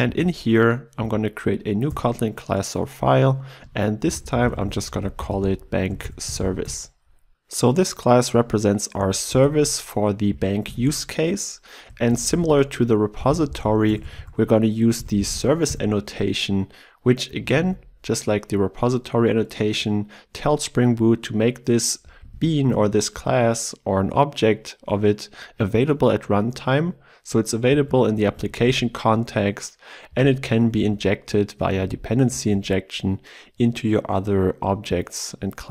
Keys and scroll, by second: 0.2 alt+Insert, 15.8 Return, 21.5 ctrl+w, 22.3 ctrl+w, 28.3 ctrl+w.